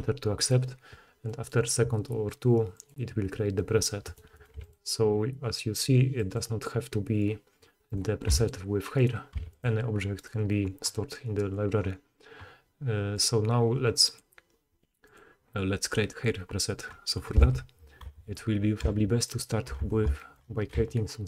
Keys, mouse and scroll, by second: 0.0-18.4 drag, 4.6 x, 7.8 middle click, 7.8 right click, 8.3 x, 9.0 middle click, 9.0 right click, 9.4 x, 10.2 middle click, 10.2 right click, 17.4 KP_3, 18.0 Tab, 18.8 z, 19.8 alt+a, 19.8 alt+shift+click, 20.4-21.2 drag, 20.7 c.